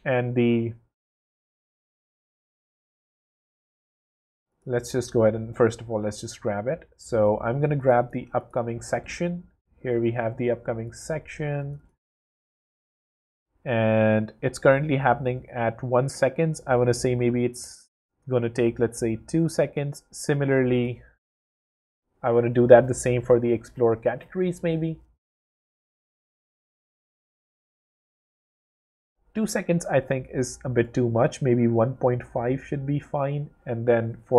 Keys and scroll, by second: 20.9 w.